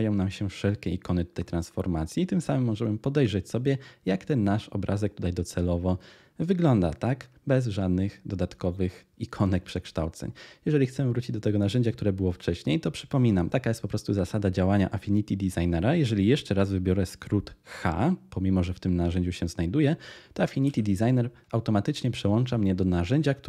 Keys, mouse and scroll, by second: 20.5 h.